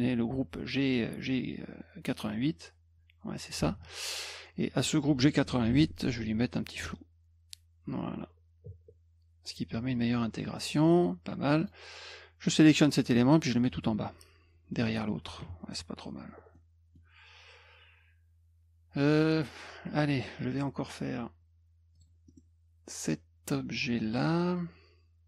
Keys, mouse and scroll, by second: 2.6-3.5 drag, 5.7 ctrl+shift+f, 6.9-9.5 drag, 10.7 click, 10.8 click, 11.0 click, 11.6 click, 13.3 click, 16.5 middle click, 21.9 click, 22.3 middle click.